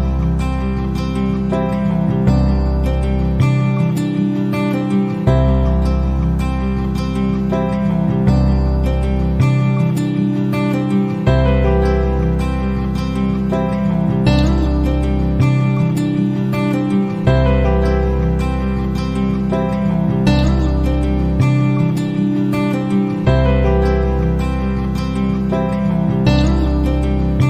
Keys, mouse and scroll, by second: 0.7 click, 2.0 right click, 3.4 click, 12.6 click, 14.9 click, 16.4 middle click, 18.6 click, 20.5 click, 21.6 click, 22.5 ctrl+d.